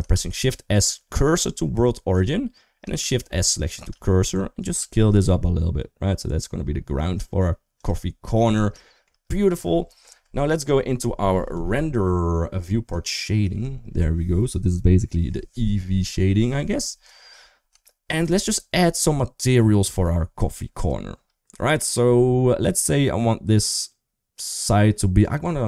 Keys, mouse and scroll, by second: 2.8 shift+s, 4.5 s, 8.0 middle click, 8.0 scroll up 1, 8.6 shift+middle click, 12.7 click, 13.8-15.1 middle drag, 13.8 scroll up 1, 15.1 scroll down 1, 15.6 middle click, 17.6 shift+middle click.